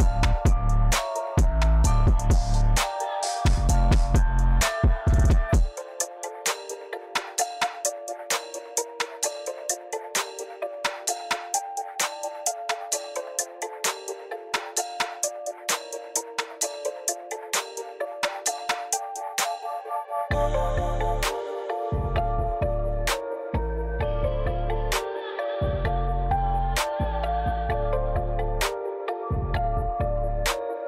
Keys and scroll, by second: 4.8 a, 7.0 Escape, 15.7-17.3 typing, 17.4 Return, 20.7 ctrl+c, 29.7-30.8 typing.